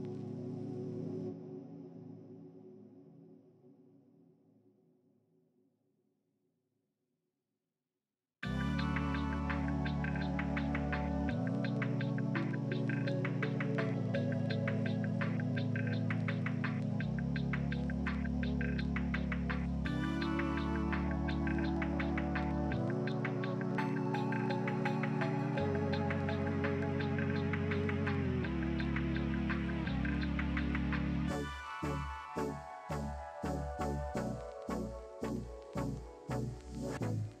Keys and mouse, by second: 0.0 middle click, 0.0 right click, 3.4 middle click, 3.4 right click, 6.1 middle click, 6.1 right click, 9.1 middle click, 9.2-21.3 drag, 12.7 middle click, 12.7 right click, 16.2 right click, 21.3 middle click, 21.4 click, 22.2 middle click, 22.3-37.4 drag, 24.6 Tab, 26.3 middle click, 26.3 right click, 31.7 KP_1.